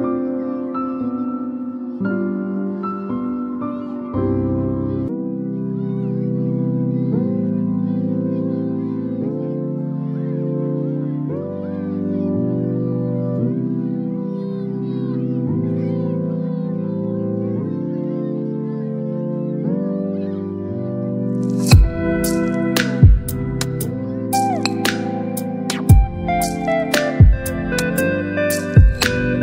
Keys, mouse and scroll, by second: 17.6 ctrl+t, 18.8 right click, 20.1 click, 26.5-29.4 drag.